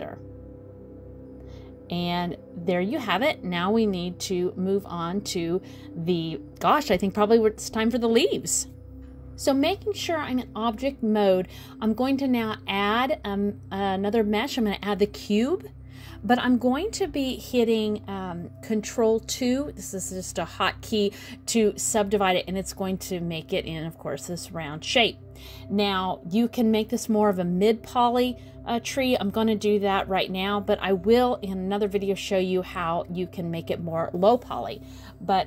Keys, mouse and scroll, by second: 0.5 click, 1.8 click, 2.2 middle click, 2.7 scroll down 1, 2.9 middle click, 5.0 click, 8.0 alt+z, 8.4 middle click, 9.0 click, 9.6 shift+a, 13.1 middle click, 17.8 ctrl+2, 19.3-20.0 scroll up 2, 20.0 scroll down 1, 22.1-22.4 scroll down 1, 25.0 click, 27.9 click, 29.0 middle click, 30.3 click, 31.4 middle click, 31.9 shift+middle click, 32.2 scroll up 2, 33.4 middle click, 34.0 middle click, 34.2 scroll down 1, 34.4 scroll up 1, 35.1 click.